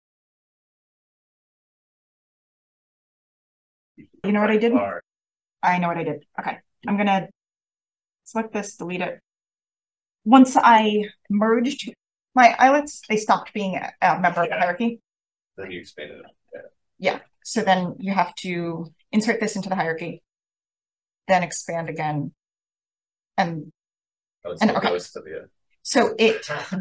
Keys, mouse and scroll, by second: 0.0 5, 1.9 click, 2.1 click, 4.0 click, 6.0-6.6 right drag, 6.6 click, 6.8 right click, 7.8 drag, 8.6 click, 8.6 scroll up 1, 9.8-10.8 drag, 19.0 click, 22.8 0, 23.6 click, 24.3 click, 24.5 click, 25.1-26.8 scroll up 1, 25.7 drag.